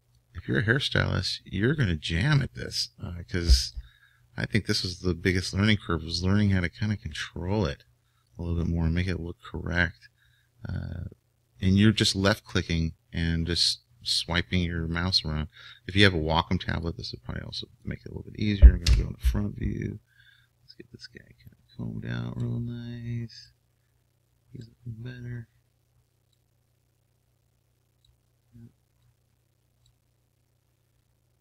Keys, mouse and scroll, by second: 15.0-21.2 drag, 18.9 KP_1, 21.9-28.2 drag, 29.2-31.4 drag.